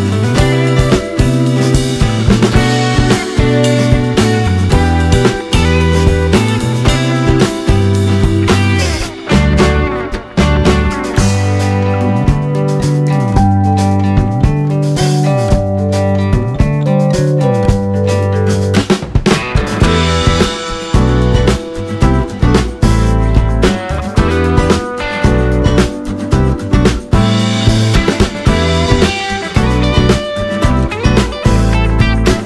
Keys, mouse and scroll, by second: 7.6 click, 9.5 click, 10.3 click, 12.2 click, 12.5 click, 14.1 click, 14.8 click, 16.0 click, 16.9 alt+click, 18.1 click, 19.6 alt+click, 19.7 click, 21.6 alt+click, 22.0-23.4 drag, 24.3 alt+click, 24.9-26.6 drag, 30.4 alt+shift+scroll up 2, 31.2 click, 31.6 click.